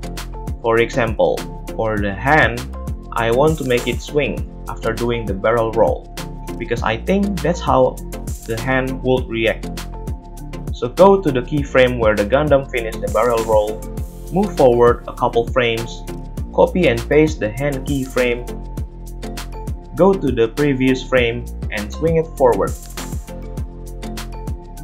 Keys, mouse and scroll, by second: 0.6 ctrl+Tab, 2.0 space, 4.1 space, 16.1 a, 16.9 ctrl+c, 17.9 ctrl+v, 19.3-24.8 drag, 21.1 a, 21.3 a, 23.5 g.